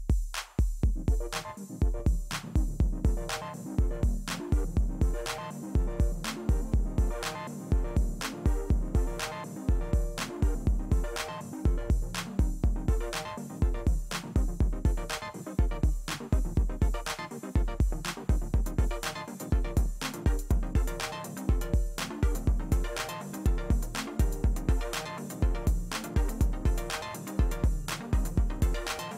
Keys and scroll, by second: 1.5 ctrl+space, 1.9 ctrl+space, 9.5 space, 15.0 space, 18.1 ctrl+space, 18.4 ctrl+space.